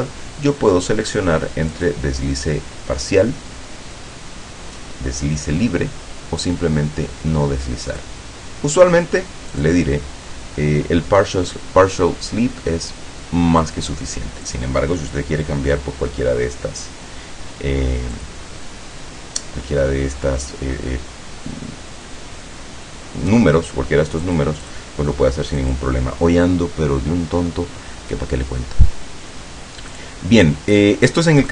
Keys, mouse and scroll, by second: 1.9 click, 8.0 click, 9.7 click, 13.7 click, 14.5 click, 18.3 click, 24.3 click, 25.7 click, 30.0 click, 31.3 click.